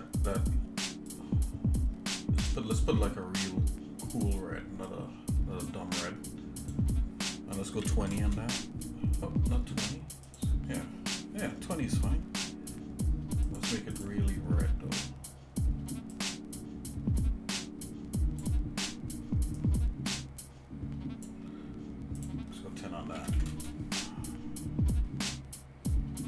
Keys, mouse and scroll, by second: 6.8-8.2 drag, 10.4-13.4 drag, 14.2 click, 22.3-23.6 drag.